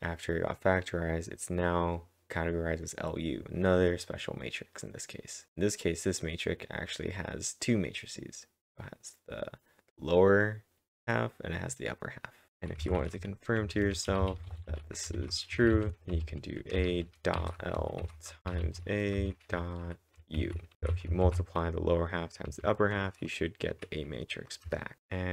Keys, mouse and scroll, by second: 2.0-4.3 drag, 5.3-8.6 drag, 6.4-8.2 scroll down 1, 9.5-11.0 drag, 9.5-10.1 scroll down 1, 10.1-11.0 scroll up 1, 10.8-21.4 typing, 11.0-12.5 scroll down 1, 21.2 ctrl+`, 22.5 Up, 24.2-25.2 typing.